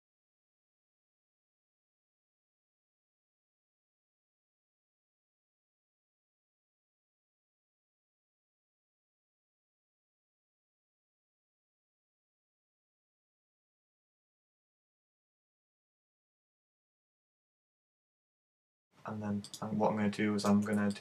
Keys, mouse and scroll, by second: 0.3 g, 0.8 click, 1.0 a, 1.1 b, 2.1 click, 2.3 a, 2.3 b, 2.9 g, 3.6 click, 3.9 z, 4.0 middle click, 5.1 KP_1, 5.4 KP_3, 5.7 z, 8.0 click, 8.4 z, 8.4 a, 8.5 b, 9.0 scroll up 8, 9.3 shift+middle click, 9.6 shift+middle click, 9.7 scroll down 6, 9.8 shift+middle click, 10.1 shift+middle click, 10.4 g, 10.7 click, 10.9 a, 11.0 b, 12.4 click, 12.6 a, 12.7 b, 13.4 g, 13.9 click, 14.0 scroll down 3, 14.1 middle click, 14.5 middle click, 14.7 a, 15.3 middle click, 15.7 shift+right click, 15.7 shift+right click, 16.0 shift+right click, 16.1 shift+right click, 16.5 g, 16.9 click, 17.5 shift+right click, 17.7 right click, 17.9 shift+right click, 18.1 shift+right click, 18.3 g, 18.8 click, 19.5 right click.